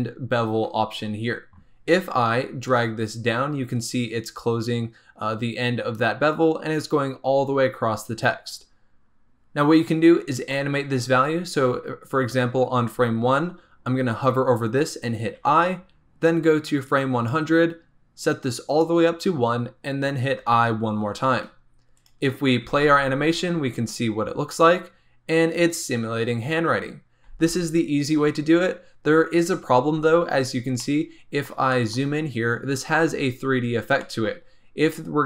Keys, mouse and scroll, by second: 1.8-2.6 scroll down 1, 2.6-5.6 drag, 16.8 click, 18.2-20.3 drag, 21.8 click, 22.6 space, 27.2 space, 30.7-32.1 middle drag, 32.1-34.0 scroll up 1, 34.0-35.2 shift+middle drag.